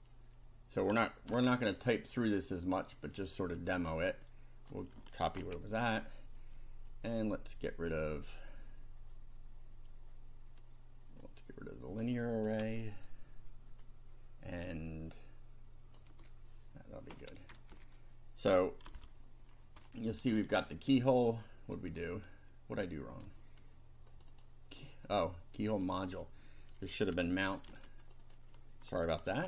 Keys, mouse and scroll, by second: 0.0 ctrl+click, 1.3 ctrl+c, 3.0 click, 4.3 click, 5.4 ctrl+v, 11.3 click, 12.6 Delete, 13.8-16.2 drag, 16.0 Delete, 17.7 Delete, 18.9 F5, 19.5-20.4 scroll down 3, 20.5 shift+middle click, 21.2 shift+click, 22.0-23.4 shift+drag, 23.4 shift+middle click, 24.2 click, 24.6 middle click, 25.1 click, 25.3 middle click, 25.7 click, 26.2-27.4 middle drag, 27.6 ctrl+c, 28.0 ctrl+click, 29.3 ctrl+v.